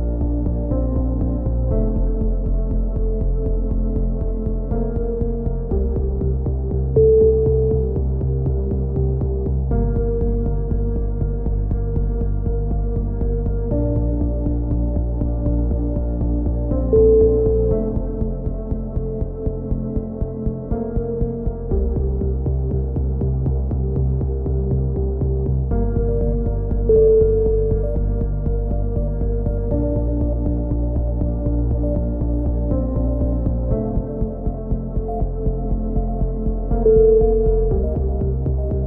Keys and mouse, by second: 1.2 middle click, 1.6 click, 3.2 s, 4.7 c, 5.6 right click, 5.7 middle click, 6.3 s, 6.5 click, 8.3 a, 8.8 z, 10.4 z, 11.2-15.5 middle drag, 15.6-16.7 middle drag, 17.5 middle click, 18.4 KP_1, 19.3 z, 20.4-21.5 drag, 24.2 KP_1, 24.5-26.4 drag, 27.9 middle click, 31.2-32.2 right drag, 32.3 right click, 33.0 KP_7, 33.3 z, 34.1 c, 34.7 click, 35.5 click, 37.0 c, 37.7 right click, 37.9-38.8 drag.